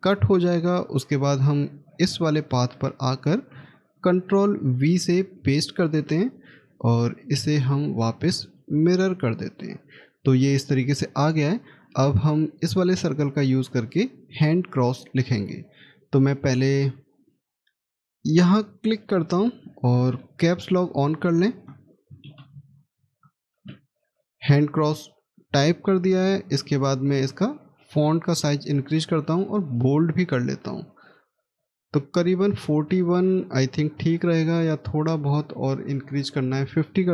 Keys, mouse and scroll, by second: 4.4 ctrl+v, 21.8-23.8 typing, 27.5 scroll up 1, 32.9-35.0 scroll down 1.